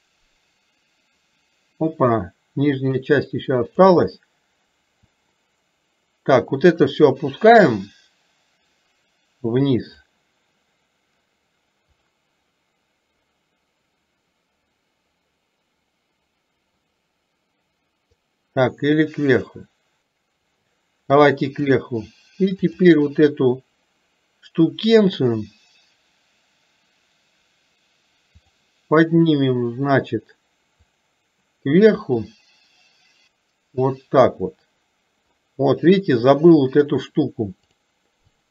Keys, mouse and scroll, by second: 7.1-10.2 drag, 12.0-16.9 drag, 18.1-20.5 drag, 21.4-22.0 drag, 28.4 click, 31.0-34.4 drag, 37.7 click, 38.4 click.